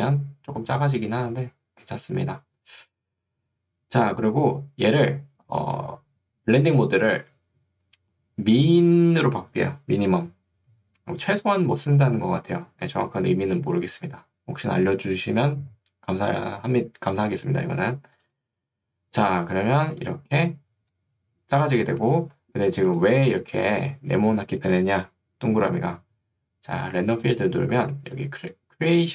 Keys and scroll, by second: 19.9 ctrl+2, 22.3 Escape, 27.9 ctrl+2.